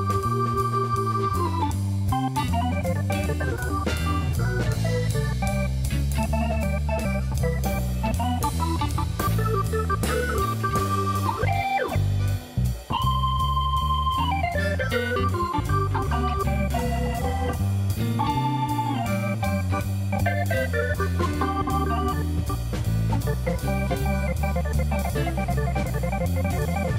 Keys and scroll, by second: 1.1 space, 3.5 space, 10.4 shift+a, 13.1 s, 19.9 s, 21.1 g, 24.7 shift+Left, 25.2 space.